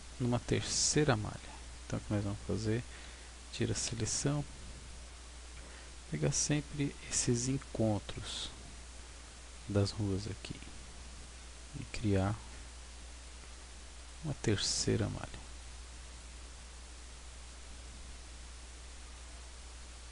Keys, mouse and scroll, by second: 2.9 a, 4.3 b, 6.4 b, 10.6 b, 12.5 b, 15.1 b, 17.1 b, 19.2 b.